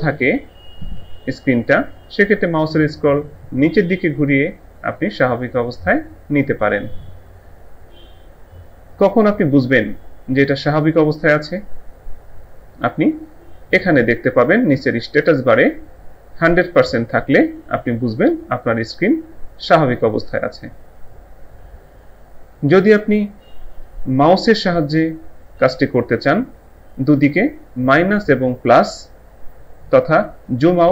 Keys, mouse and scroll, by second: 0.1 ctrl+scroll up 1, 1.1 ctrl+scroll up 1, 2.0 ctrl+scroll, 2.4 ctrl+scroll down 1, 4.7 ctrl+scroll up 1.